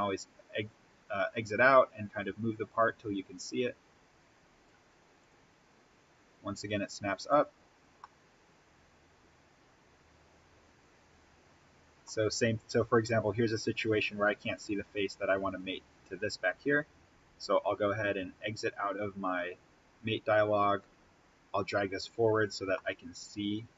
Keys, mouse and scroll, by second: 2.7-3.5 scroll down 1, 5.1 click, 7.9-12.2 middle drag, 12.2 scroll up 1, 12.7 scroll down 1, 16.3-18.0 scroll up 1, 19.7-20.7 scroll up 1, 20.7-22.4 drag, 22.6-23.7 middle drag.